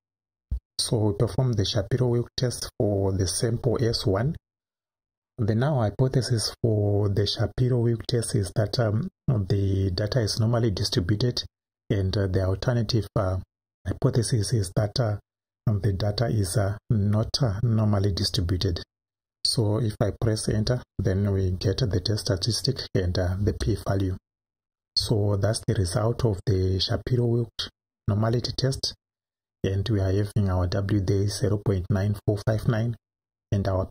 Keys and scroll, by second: 0.4 1, 20.5 Right, 23.4 Return.